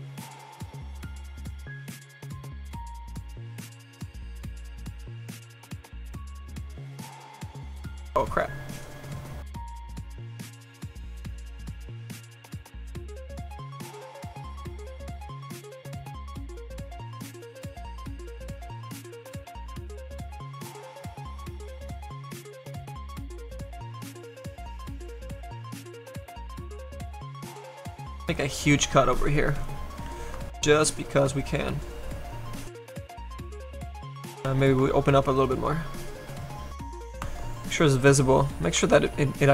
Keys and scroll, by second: 1.0 s, 20.4 s, 27.2 s, 34.5 s.